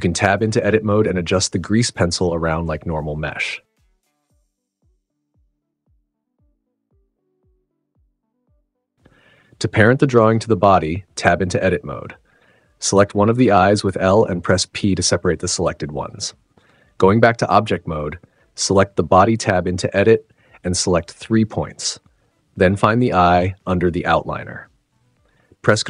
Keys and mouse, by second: 0.1 Tab, 1.0 l, 1.7 g, 2.8 click, 3.0 Tab, 4.9 click, 5.9 click, 6.9-7.2 drag, 7.8 click, 8.5 click, 8.6 click, 9.0 shift+d, 9.6 click, 10.0 click, 10.3 space, 10.9 space, 11.5 super+z, 12.4 Tab, 14.9 p, 16.2 Tab, 17.5 Tab, 18.4 click, 18.6 click, 19.2 shift+click, 21.3 click, 22.7 shift+click, 22.8 shift+click.